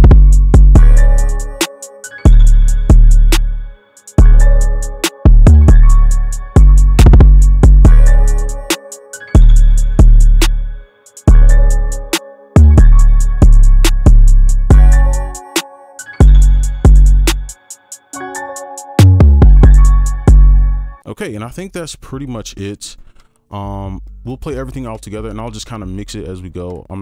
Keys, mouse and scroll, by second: 3.8 double click, 4.7 ctrl+click, 5.3 right click, 6.5 space, 10.1 double click, 15.5 ctrl+right click, 20.4 space, 21.1 double click, 24.2 double click.